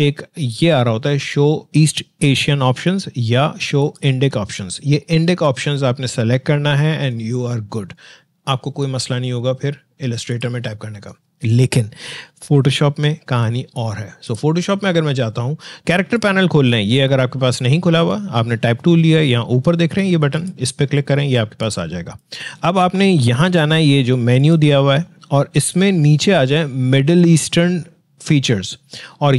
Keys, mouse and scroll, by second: 14.3 click.